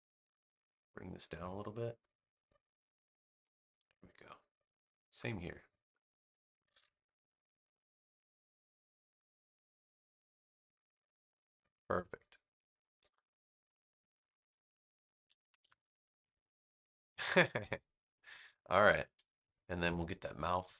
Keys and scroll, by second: 12.9 space, 15.3 super+-, 19.1 super+=.